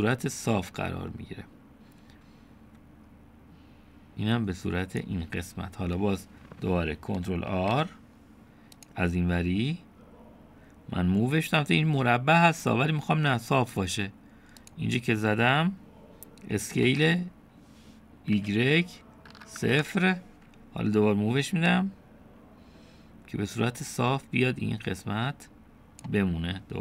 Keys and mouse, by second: 8.5 ctrl+r, 17.9 s, 20.8 typing, 22.8-26.8 drag, 23.8 typing.